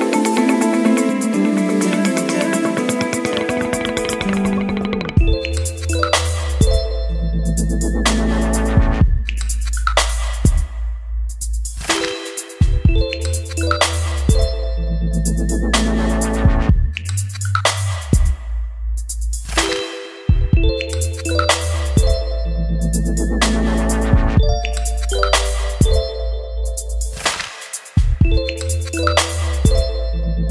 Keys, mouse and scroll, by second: 4.4-4.7 scroll up 2, 5.0-22.3 drag, 22.0-23.1 typing, 24.4-29.9 drag.